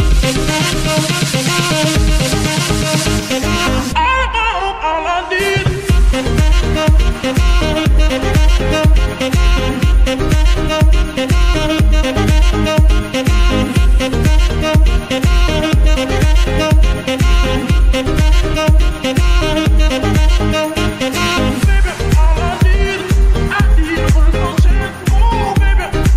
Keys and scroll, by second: 3.7 ctrl+v, 6.9 g, 9.6 Escape, 12.0 a, 13.4 ctrl+shift+s, 25.9 g.